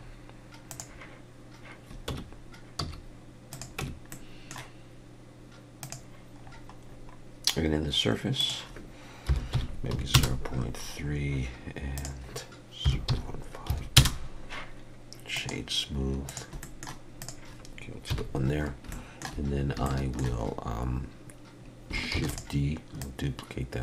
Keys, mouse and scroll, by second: 0.0-0.7 scroll up 2, 0.7 click, 2.1 Tab, 2.8 s, 3.8 Tab, 4.1 middle click, 5.8 click, 6.4-7.2 scroll down 8, 8.4 click, 11.9 click, 15.3 right click, 16.5 shift+middle click, 16.5 scroll down 2, 16.6 middle click, 17.2 click, 18.1 KP_1, 18.9 shift+middle click, 19.5 scroll up 2, 19.9 shift+middle click, 22.2 shift+d, 23.0 click.